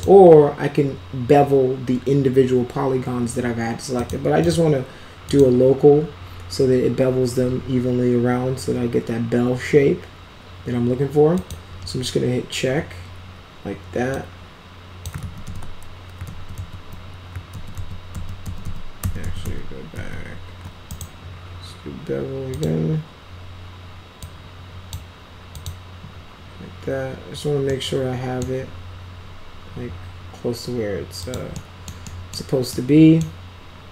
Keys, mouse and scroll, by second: 3.9 click, 4.3 click, 5.2 click, 11.3 click, 14.0 click, 15.1 ctrl+z, 15.4 ctrl+z, 16.2 ctrl+z, 16.5 ctrl+z, 17.5 ctrl+z, 17.7 ctrl+z, 18.1 ctrl+z, 18.4 ctrl+z, 18.5 ctrl+z, 19.0 ctrl+z, 19.2 ctrl+z, 19.3 ctrl+z, 19.9 ctrl+z, 20.8 right click, 22.4 click, 24.1-24.8 drag, 25.5 click, 27.6-28.4 right drag, 31.2 click, 31.5 middle click, 32.0 middle drag, 32.6-33.1 middle drag.